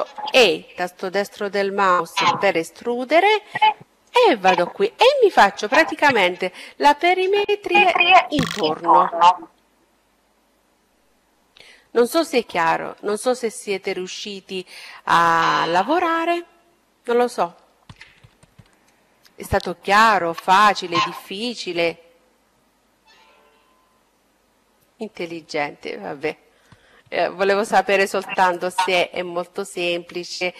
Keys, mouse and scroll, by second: 0.8-2.8 drag, 3.6-6.2 middle drag, 15.2-18.1 middle drag, 17.8-19.5 drag.